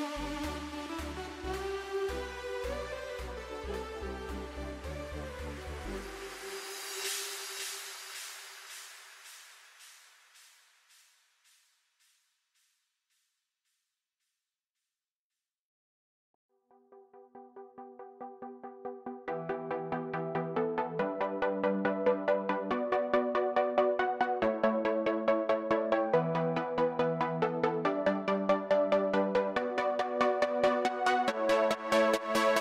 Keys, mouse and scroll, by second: 0.2 Tab, 5.5 s, 11.1 g, 17.0-17.5 scroll down 1, 23.0 Tab, 29.2-31.0 scroll down 3.